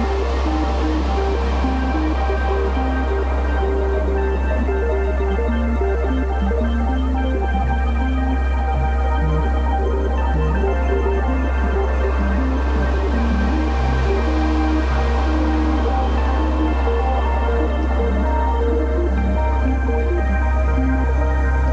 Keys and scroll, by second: 7.6 space.